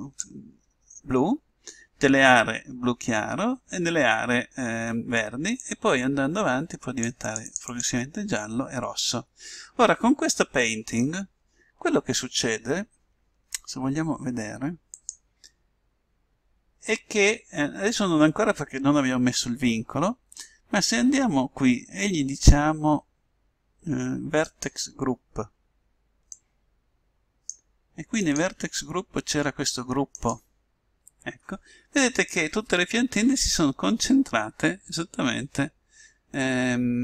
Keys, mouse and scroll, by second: 5.6-9.5 drag, 15.1-16.7 drag, 20.5-22.2 drag, 24.6-26.3 drag, 26.4-28.2 drag, 28.3-30.2 drag, 36.5-37.0 middle drag.